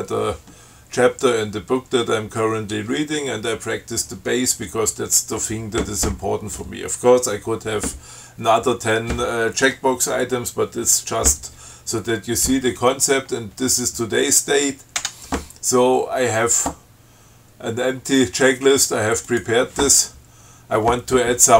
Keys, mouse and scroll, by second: 14.0 click, 15.2 Tab, 19.5 click.